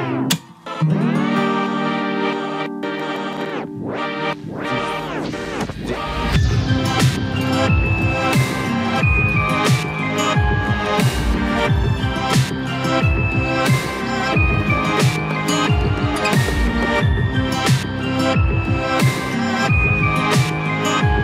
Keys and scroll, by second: 12.6 ctrl+t.